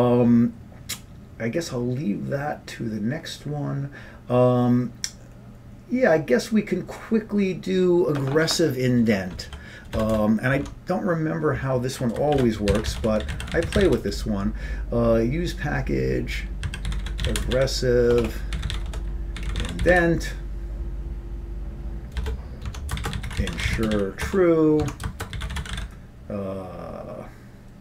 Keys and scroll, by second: 9.5 End, 10.0 Return, 10.2 Return, 10.7 Tab, 12.2-14.4 typing, 16.5-20.5 typing, 22.2 Return, 22.7 Tab, 22.8-26.0 typing, 24.9 Tab.